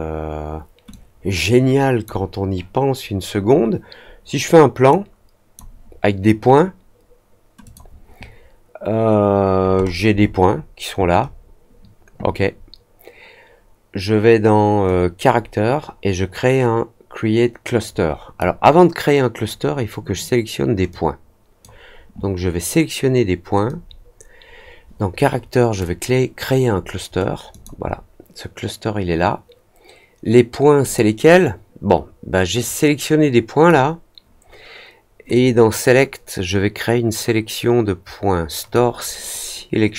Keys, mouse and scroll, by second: 0.8-2.0 drag, 4.8-5.5 drag, 7.6 click, 9.7-10.6 scroll up 3, 11.2 scroll down 1, 14.8-18.3 drag, 20.8 click, 23.6-25.7 drag, 27.4 click, 30.8 click, 32.6-33.6 drag, 35.3-38.7 drag.